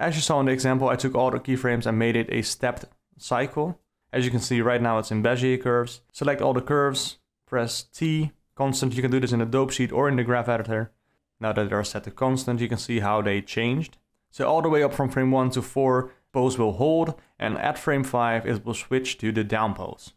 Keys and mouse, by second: 0.3 d, 1.1 middle click, 1.7 a, 3.0 a, 3.8 KP_Decimal, 6.2 shift+F12, 7.2 t, 11.9 shift+F6, 17.9 d.